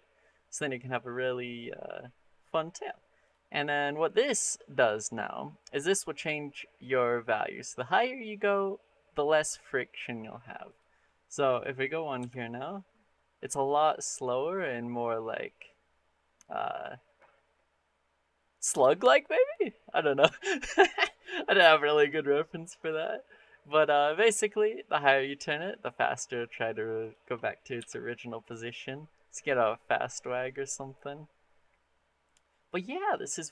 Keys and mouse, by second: 2.2-3.1 drag, 6.0-9.8 drag, 10.5 click, 11.3 click, 12.0 r, 21.8 click, 22.6 click, 23.9-26.0 drag, 26.8 click, 27.6 r.